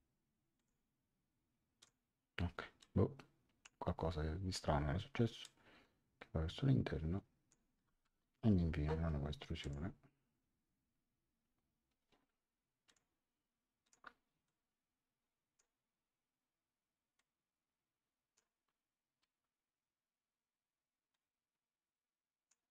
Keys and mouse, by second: 0.5 click, 1.8 click, 2.8 click, 5.4 click, 8.0 Return, 8.0 KP_Enter, 9.6 click, 12.8 click, 15.5 click, 17.1 click, 21.1 click.